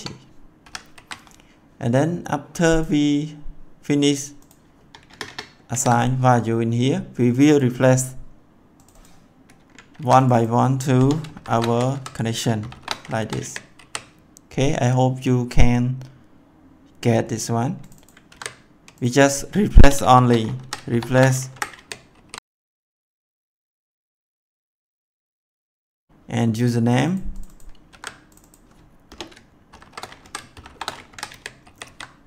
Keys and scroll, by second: 0.6 ;, 0.9 ctrl+s, 5.0 Return, 5.7 ctrl+v, 9.9 ctrl+c, 11.0 BackSpace, 11.3 shift+', 11.9 Left, 12.6 shift+=, 13.2 Left, 13.3 ctrl+v, 13.7 ctrl+s, 18.2 ctrl+c, 19.7 BackSpace, 20.0 shift+', 20.5 Left, 20.8 shift+=, 21.4 Left, 21.7 ctrl+v, 22.1 ctrl+s, 24.9 ctrl+c, 27.8 ctrl+c, 29.0 BackSpace, 29.6 shift+', 30.1 Left, 30.4 shift+=, 31.0 Left, 31.2 ctrl+v, 31.5 ctrl+s.